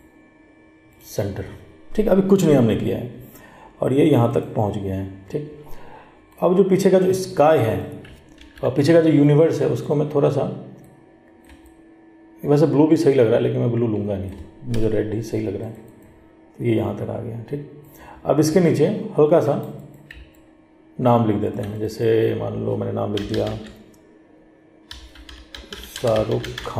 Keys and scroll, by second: 8.5 ctrl+t.